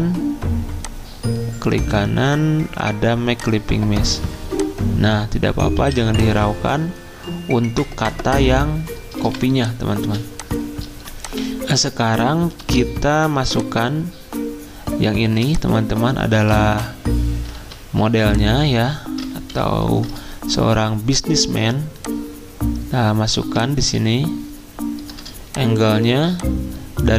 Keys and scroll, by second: 5.7 z, 9.2-10.0 typing, 12.6 typing, 16.9-17.6 typing, 26.1 z.